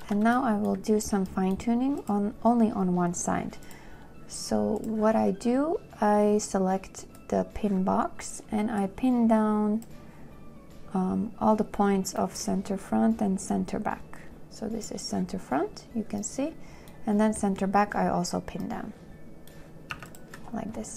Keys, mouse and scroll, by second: 20.2 2.